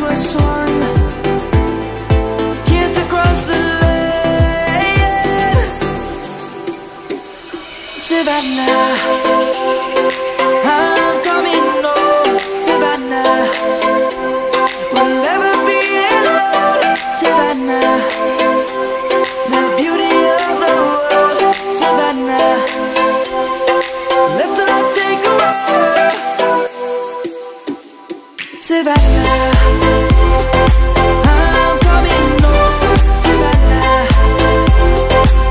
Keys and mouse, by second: 1.0 ctrl+7, 2.8 1, 4.5 click, 5.8 middle click, 7.4 middle click, 8.8 1, 14.2 ctrl+7, 15.2 middle click, 16.4 middle click, 17.4 click, 18.0 Tab, 18.8 click, 20.9 shift+s, 23.1 Tab, 24.5 shift+a, 29.0 click, 30.5 middle click, 32.6 s.